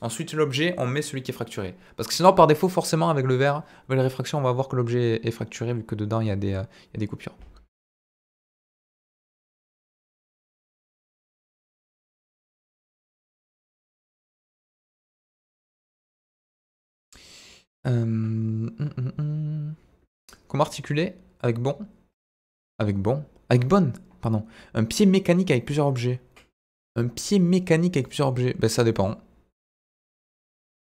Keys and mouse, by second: 27.9 click.